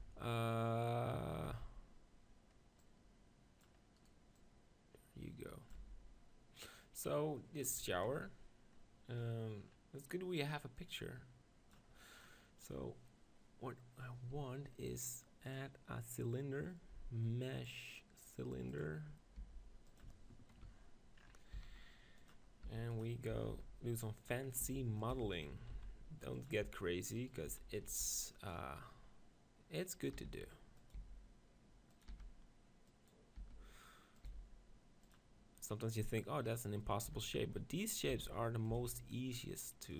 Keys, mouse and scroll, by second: 0.0 Tab, 1.5 Tab, 2.8-6.2 drag, 4.0-5.8 right drag, 5.8 Tab, 8.7 middle click, 10.8-12.7 drag, 12.7-14.8 middle drag, 15.7-17.4 drag, 19.4 g, 20.0 click, 21.6 s, 22.8 g, 23.3 s, 24.6 s, 25.2 g, 25.4-28.9 drag, 25.5 s, 26.6 Tab, 27.2-28.3 right drag, 27.5 z, 27.9 b, 30.2 e, 30.9-35.0 drag, 31.0 s, 32.1 e, 33.5 e, 34.3 s, 35.1-37.8 drag, 37.1 e, 38.0-39.8 drag, 38.1 e, 38.8 s.